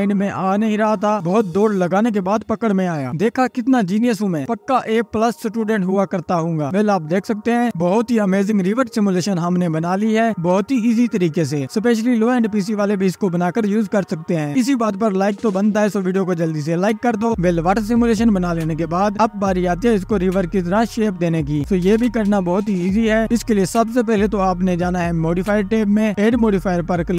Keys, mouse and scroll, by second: 0.1 click, 0.3 space, 0.7 ctrl+s, 1.7 scroll down 1, 2.7 click, 3.2 scroll up 1, 3.5 scroll down 1, 13.5 scroll down 2, 13.6-14.1 scroll up 2, 14.1 ctrl+s, 14.6 scroll down 1, 15.6-20.1 drag, 20.1 scroll down 1, 20.7 click, 21.1 space, 21.5 ctrl+s, 21.8 space, 22.3 click, 23.6 space, 24.0 space, 25.8-27.0 drag.